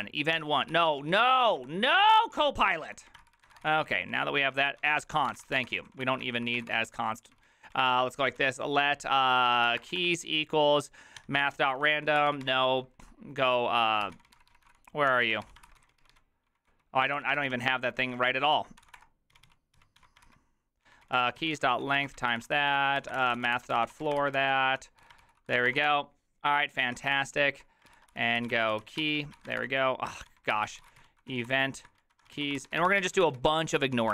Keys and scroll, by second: 0.1-12.4 typing, 13.8-34.1 typing.